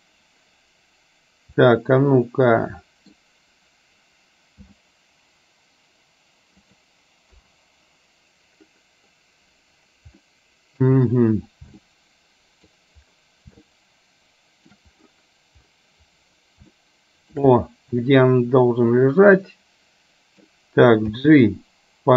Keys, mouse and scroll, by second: 1.8-3.3 middle drag, 4.7 g, 7.4 KP_0, 10.3 middle click, 11.9 middle click, 13.8-14.8 shift+middle drag, 16.9 shift+middle click, 18.2-20.5 middle drag, 21.0 g.